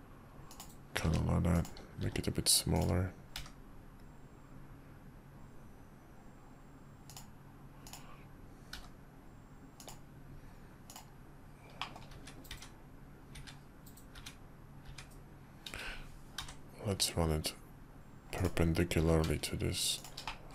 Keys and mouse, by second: 1.0 g, 2.0 s, 3.3 g, 7.8 middle click, 8.7 g, 11.8 middle click, 12.1-14.8 typing, 16.4 r, 19.0 g, 20.3-20.5 middle drag.